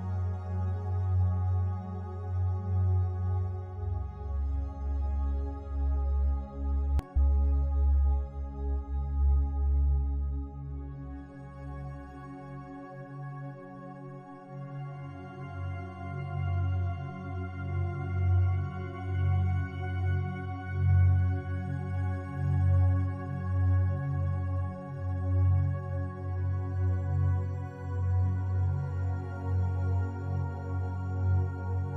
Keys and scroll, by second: 0.0 ctrl+t.